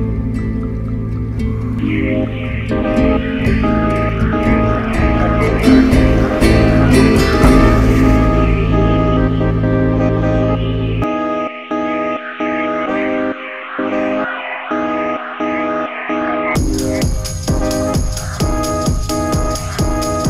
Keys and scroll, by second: 14.0 4.